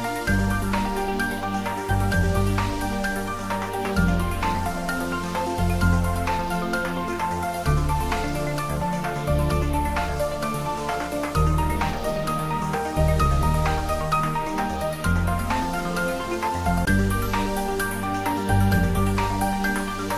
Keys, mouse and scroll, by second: 0.0 y, 6.3 click, 7.6-9.9 middle drag, 9.9 scroll up 1, 11.8-12.3 scroll down 1, 14.7 click, 16.1 click, 17.3-18.5 typing.